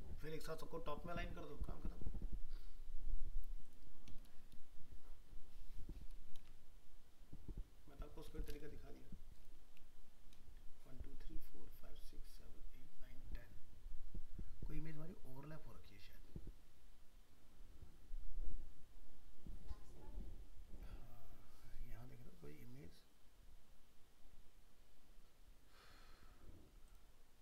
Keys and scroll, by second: 6.3 ctrl+v.